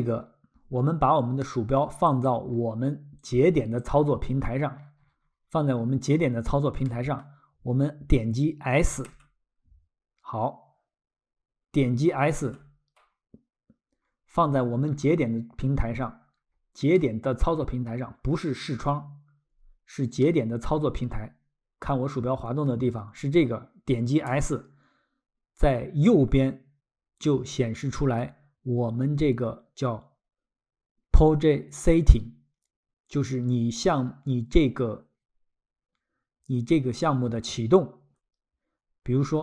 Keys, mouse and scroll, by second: 1.5 middle click, 2.1 click, 2.6 scroll, 3.2 click, 4.3 scroll, 6.9 middle click, 9.2 s, 12.4 s, 14.0-14.3 scroll, 17.0 middle click, 18.4-18.9 scroll, 20.2 middle click, 23.0-23.4 scroll, 24.3 s.